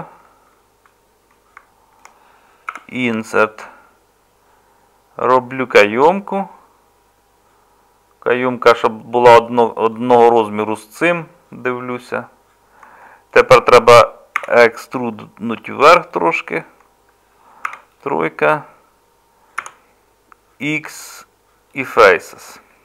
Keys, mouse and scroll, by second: 14.4 e, 17.7 3, 19.6 x.